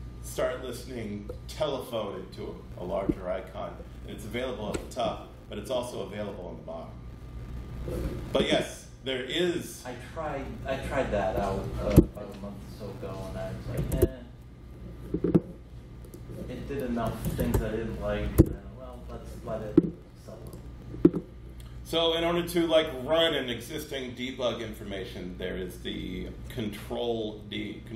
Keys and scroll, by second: 12.0 super+,, 13.5-14.5 typing, 17.0-18.9 typing.